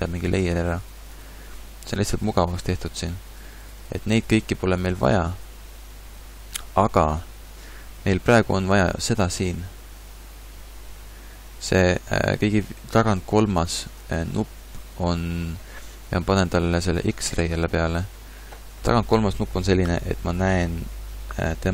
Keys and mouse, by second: 21.5 middle click.